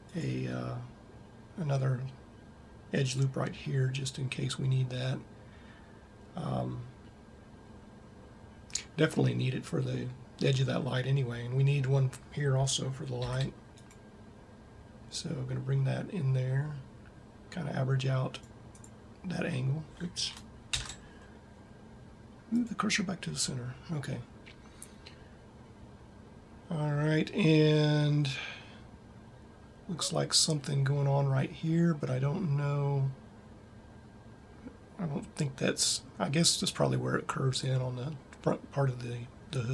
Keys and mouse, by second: 13.0 ctrl+r, 21.1 shift+s.